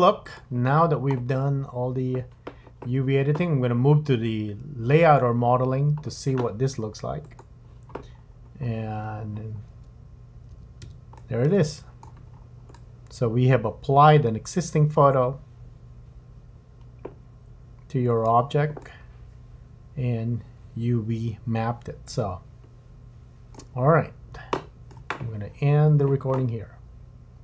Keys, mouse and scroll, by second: 0.3 click.